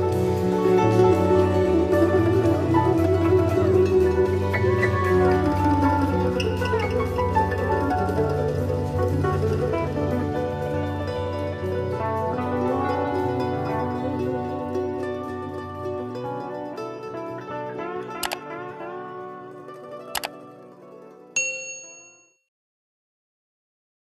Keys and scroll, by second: 3.2 BackSpace, 6.0 super+=.